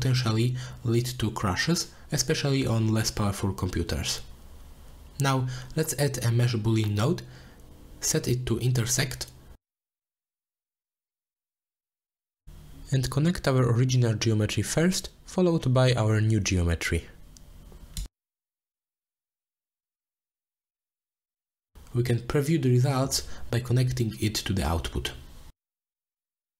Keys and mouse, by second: 0.5 ctrl+s, 3.6-4.2 drag, 5.0 shift+a, 10.5 click, 11.4-12.6 drag, 13.8 shift+a, 18.1-19.9 drag, 22.7 click, 23.0-25.3 drag.